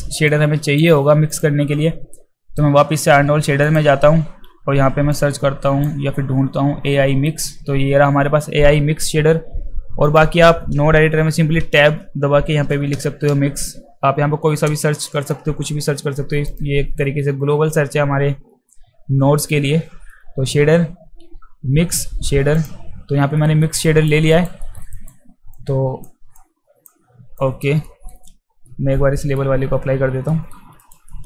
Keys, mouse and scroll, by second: 0.3-0.8 drag, 1.3 click, 3.7 click, 5.1-5.8 drag, 10.0 click, 11.6 Tab, 13.3 x, 16.5 click, 22.5 click, 23.3 alt+middle drag, 23.9 alt+right click, 24.3 alt+right click, 24.6 alt+middle click, 24.9 alt+right click, 25.5-25.9 drag, 25.9 click, 26.3-26.9 drag, 27.4 drag, 27.8 alt+middle click, 28.6 middle click, 30.3 alt+middle click, 30.8 alt+right click, 31.1 alt+middle click.